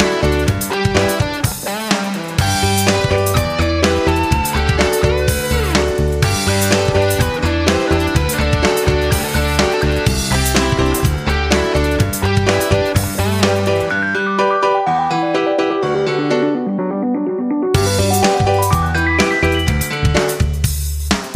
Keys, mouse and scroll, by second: 0.0 Down, 1.8 click, 5.8 click, 7.3 shift+click, 9.0 click, 10.5 shift+click, 12.2 ctrl+z, 13.2 shift+click, 14.6 shift+click, 16.1 F9, 16.7 click, 17.1 right click, 18.0-21.3 drag.